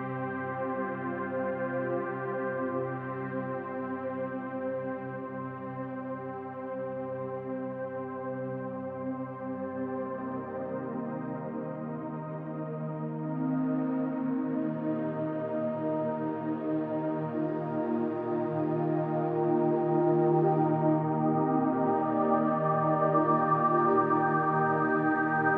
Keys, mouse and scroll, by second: 1.8 click, 2.9 click, 5.8 click, 7.4-8.1 typing, 9.3 click, 12.7 ctrl+v, 13.9 ctrl+g, 15.0 ctrl+shift+click, 16.3 click, 17.4 click, 18.4 click, 20.3 click, 20.9 click, 22.2 click, 23.7-25.5 drag.